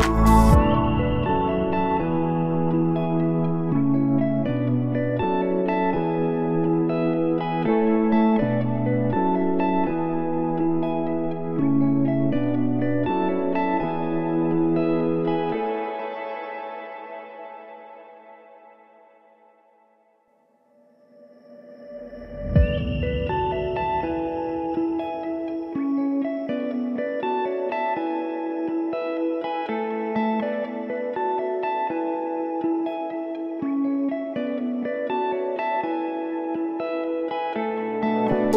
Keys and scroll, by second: 10.1 s, 20.7 p, 24.3 ctrl+s, 27.2 s, 30.6 ctrl+s, 31.3 r.